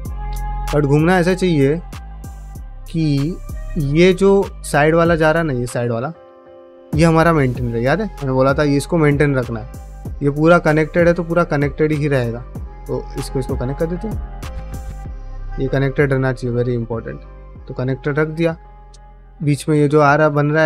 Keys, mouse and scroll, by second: 0.4 middle click, 1.2 shift+middle click, 1.9 click, 2.0 g, 3.2 click, 3.6 g, 4.1 click, 4.2 g, 4.7 click, 4.9 g, 5.3 middle click, 5.5 3, 5.9 alt+click, 6.3 ctrl+middle click, 6.7-8.4 middle drag, 9.1 middle click, 10.2 ctrl+middle click, 10.5 middle click, 12.3 2, 12.5 click, 13.2 shift+click, 13.4 f, 13.9 1, 14.3 click, 14.4 g, 15.0 click, 15.1 g, 15.8 click, 16.4 shift+click, 16.8 middle click, 18.0 x, 20.4 x.